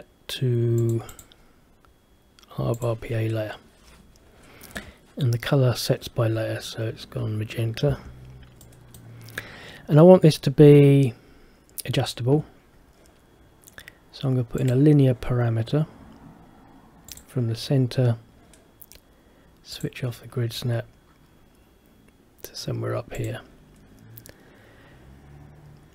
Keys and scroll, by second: 8.0 Escape.